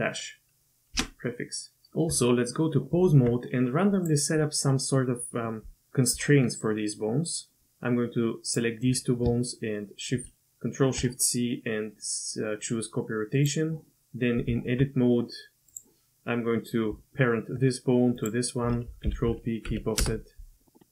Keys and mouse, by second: 2.1 Tab, 10.1 ctrl+shift+c, 14.5 Tab, 18.1 shift+click, 19.0 ctrl+p.